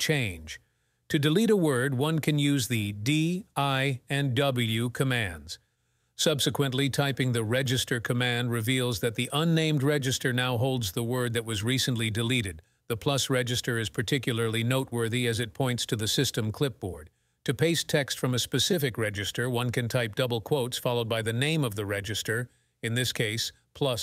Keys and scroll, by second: 0.4-1.2 typing, 19.8-20.5 typing.